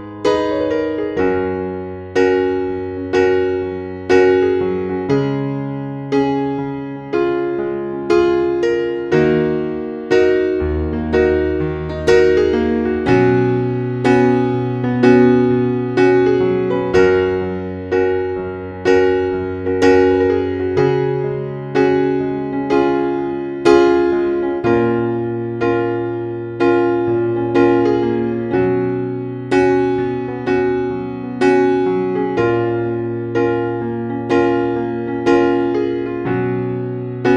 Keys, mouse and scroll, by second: 0.7 click, 1.5 ctrl+c, 2.7 click, 6.8 Delete, 7.7 ctrl+v, 9.1 click, 10.2 scroll up 1, 14.4 click, 18.6 shift+click, 20.4-27.0 drag, 27.0 scroll down 1, 27.7 click, 28.2 scroll down 1, 28.6 scroll up 1, 29.2 click, 30.4 click, 32.0 ctrl+Down, 32.7 click, 33.5 ctrl+s, 37.1 click.